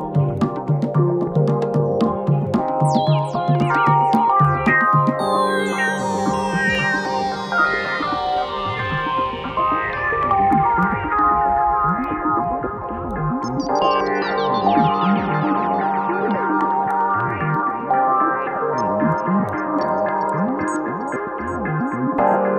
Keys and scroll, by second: 0.1 F1, 1.5 1, 7.1 alt+4, 9.6 3, 13.6 4, 18.3 3, 20.2 Escape, 21.0 4.